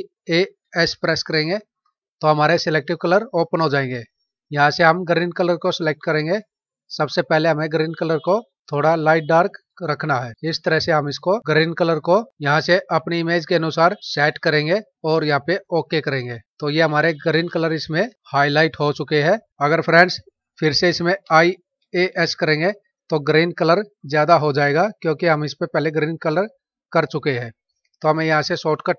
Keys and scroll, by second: 0.3 alt+a, 0.7 alt+s, 16.8 ctrl+-, 21.1 alt+i, 21.7 alt+a, 22.0 alt+s.